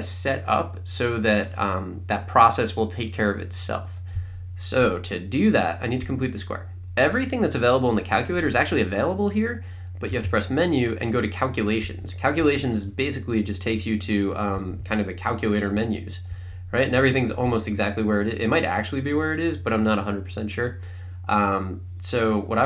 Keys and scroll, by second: 10.2 Menu, 11.9 Up, 12.4 Right, 14.6 Down, 15.8 Right, 16.3 Left.